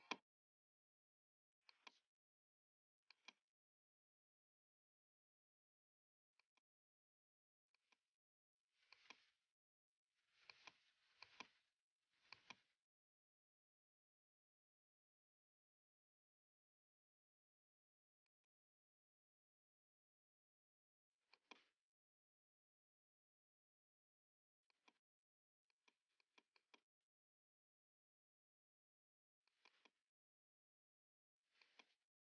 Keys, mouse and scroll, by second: 0.0 click, 1.8 click, 3.2 click, 3.6-8.3 typing, 6.5 click, 7.8 click, 9.0 click, 9.6 middle click, 9.7 middle click, 10.6 click, 10.6-11.3 scroll, 11.3 click, 12.4 click, 12.7-16.4 typing, 13.9 scroll, 18.4 click, 19.0-21.3 typing, 22.3 click, 22.3-22.8 scroll down 1, 23.4-24.3 scroll up 1, 24.8 click, 25.8 click, 26.5-28.6 typing, 26.8 click, 29.6 click, 29.7 click, 31.7 click.